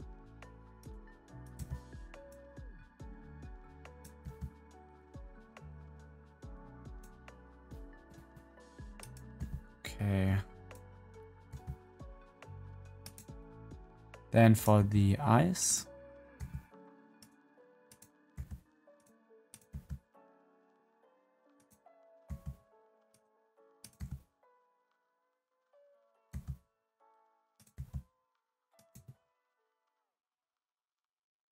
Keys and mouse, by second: 1.4 click, 1.5 g, 4.1 g, 9.0 click, 9.3 g, 11.3 click, 11.4 g, 14.7 g, 16.1 click, 16.3 g, 17.8 click, 18.3 g, 19.6 g, 22.2 g, 23.9 g, 26.0 middle click, 26.2 g, 26.9 click, 27.7 g.